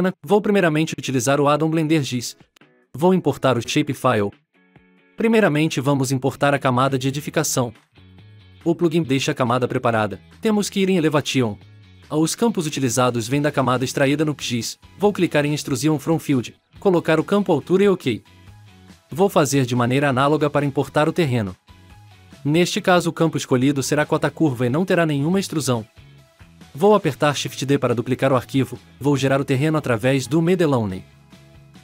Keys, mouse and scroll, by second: 9.4-10.1 drag, 20.8 click, 21.5 click, 22.5 click, 22.9 click, 23.2 click, 23.8 click, 25.5 shift+d, 27.7-29.0 drag, 29.0 scroll up 3, 29.1 middle click, 29.8-30.2 scroll up 4, 31.3 click, 31.6-31.8 scroll up 3.